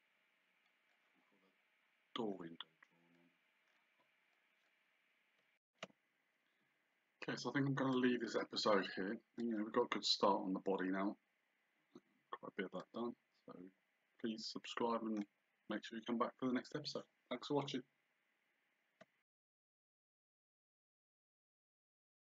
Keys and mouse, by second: 3.2 click, 4.4 click, 6.5 shift+z, 8.0 click, 12.8 click.